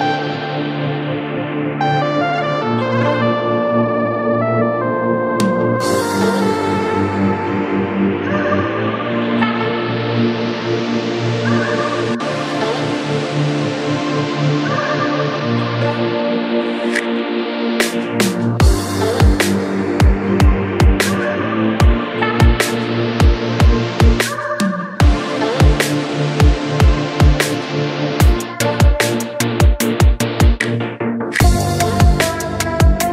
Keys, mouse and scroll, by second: 0.2-4.1 shift+drag, 7.0-11.7 shift+drag, 27.0-31.9 drag.